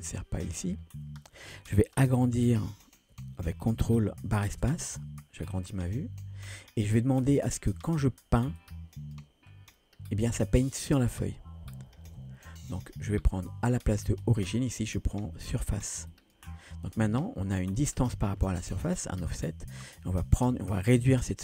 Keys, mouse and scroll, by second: 4.5 ctrl+space, 5.4-5.7 scroll down 1, 5.7-7.5 middle drag, 8.6 click, 9.5 scroll down 1, 9.8 middle click, 12.1 ctrl+z, 14.2-21.4 drag.